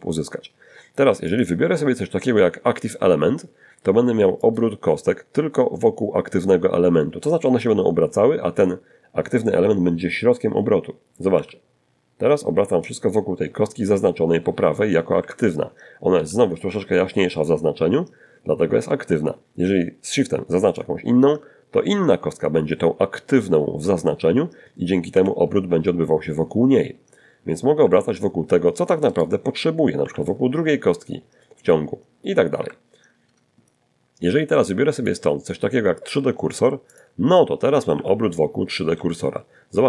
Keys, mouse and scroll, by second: 2.6 click, 9.5 r, 13.4 Escape, 14.5 z, 18.9 shift+right click, 23.3 r, 26.0 Escape, 27.3 shift+right click, 28.2 shift+r, 30.8 Escape, 33.2 click, 35.1 click, 36.1 r, 37.1 Escape, 37.9 g, 38.6 click, 39.1-39.8 middle drag.